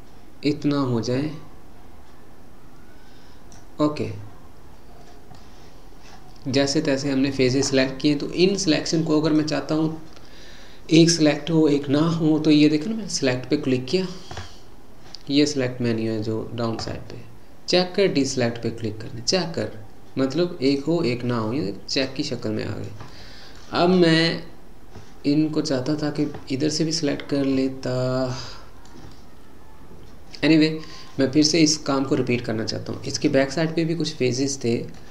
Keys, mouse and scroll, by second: 5.4-8.4 middle drag, 9.3-12.3 drag, 21.5-26.9 middle drag, 29.2-32.4 middle drag.